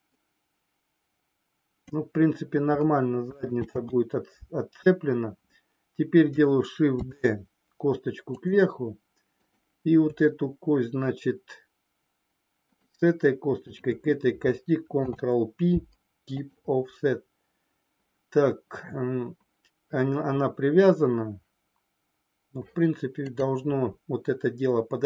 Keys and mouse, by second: 3.5 ctrl+z, 6.9 shift+d, 8.3 click, 9.3 click, 12.5 shift+click, 13.6 shift+click, 14.9 ctrl+p, 23.3-25.0 drag.